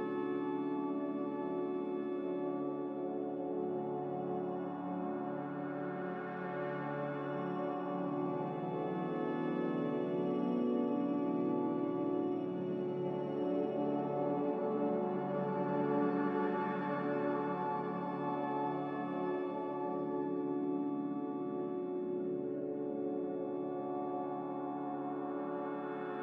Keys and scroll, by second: 2.2 r, 5.1 ctrl+z, 10.8 ctrl+c, 15.1 ctrl+v, 15.9 ctrl+c, 17.1 ctrl+v, 17.6 Escape, 18.6 ctrl+z, 19.6 ctrl+c, 22.9-23.7 typing, 25.2 ctrl+c.